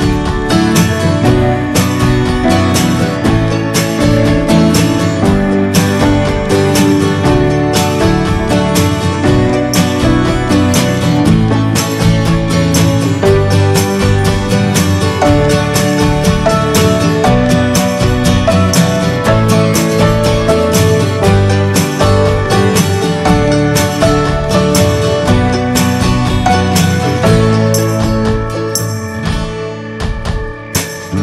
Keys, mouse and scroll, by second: 0.1 scroll down 1, 0.3 middle click, 0.5 scroll up 1, 0.5 scroll down 1, 0.7 shift+middle click, 1.1 scroll up 1, 1.4-2.5 middle drag, 2.5-3.4 shift+scroll up 6, 2.6 middle click, 3.0 shift+middle click, 4.2-11.0 drag, 11.0-11.6 scroll down 6, 11.3 middle click, 11.6 shift+middle click, 11.8-12.7 shift+scroll up 9, 13.6-15.4 shift+drag, 15.4 scroll down 2, 16.0 ctrl+z, 18.4 scroll up 2, 19.4-20.4 scroll up 1, 21.0 middle drag, 21.2 scroll up 3, 21.8-22.2 shift+middle drag, 22.2 shift+scroll up 1, 23.3-23.7 scroll up 4, 23.5 shift+middle click, 24.0-26.2 drag, 26.2 shift+middle click, 26.9-29.5 drag, 29.5 scroll down 3, 29.9 shift+middle click, 30.1 scroll up 1, 30.4 ctrl+z, 30.6-31.2 scroll up 4, 30.8 shift+middle click.